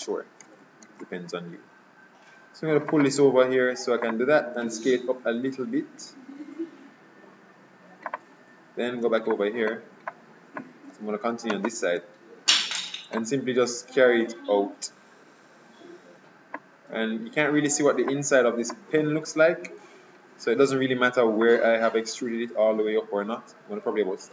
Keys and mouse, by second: 0.9 ctrl+r, 4.9 s, 9.4-10.6 middle drag, 11.7 middle click, 12.1-13.2 right drag, 13.2-15.1 drag, 18.2-20.9 middle drag, 21.5-23.4 drag.